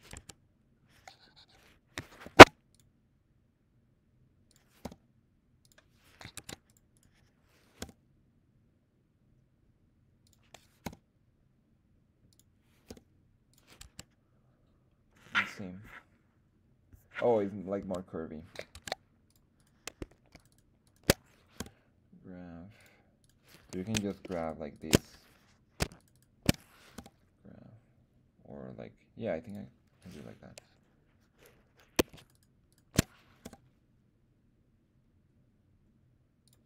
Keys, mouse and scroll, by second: 0.1 Tab, 2.2 ctrl+r, 4.4 click, 4.8 r, 5.6 click, 6.3 ctrl+Tab, 6.9 right click, 7.8 g, 10.2 click, 10.8 r, 12.3 click, 12.9 g, 13.5 click, 13.8 Tab, 17.8 Tab, 18.7 ctrl+Tab, 19.5 click, 19.5 right click, 20.3 alt+shift+click, 20.3 alt+shift+right click, 20.5 alt+shift+click, 20.8 alt+shift+click, 21.5 g, 22.8 click, 23.2 click, 23.2 right click, 24.2 alt+shift+right click, 24.4 alt+shift+click, 24.7 alt+shift+click, 25.9 alt+shift+click, 26.1 alt+shift+click, 26.9 g, 29.4 click, 30.0 right click, 32.2 alt+shift+right click, 32.3 alt+shift+right click, 32.7 alt+shift+click, 33.4 g, 36.4 click.